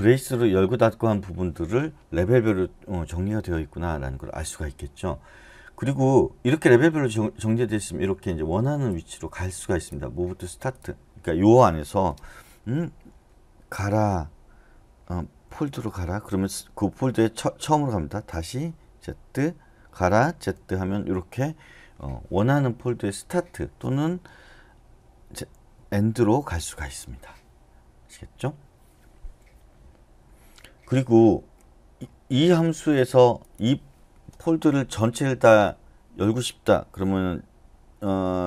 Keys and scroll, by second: 13.9 [, 15.4 z, 18.8 [, 20.4 z, 25.0-26.2 typing.